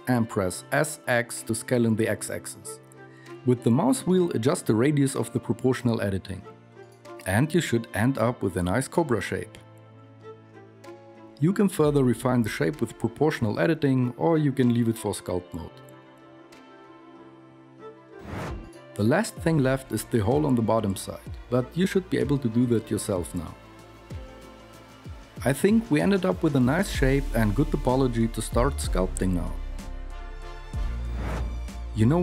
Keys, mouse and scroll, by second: 13.3 s, 20.8 e, 22.3-23.1 f, 23.2-24.0 f, 24.3 ctrl+r, 25.0 Tab, 28.2 KP_1, 31.4 Tab, 31.4 alt+z.